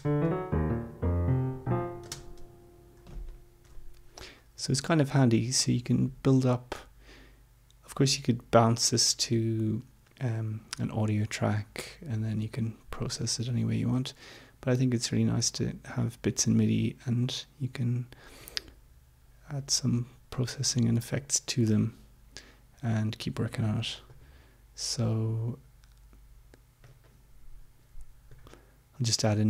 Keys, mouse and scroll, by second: 0.2 space, 2.1 space, 3.6 Home, 18.4-19.7 drag, 24.0 right click, 26.9 click, 28.3 right click.